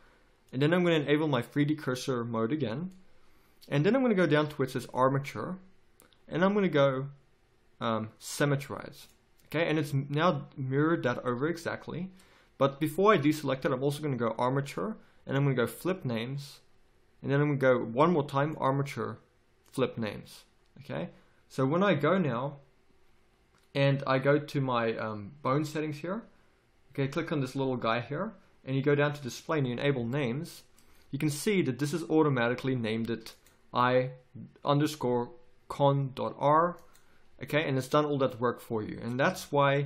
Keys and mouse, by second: 0.4-6.1 drag, 30.1-33.3 middle drag, 33.3-37.8 drag, 39.2 z.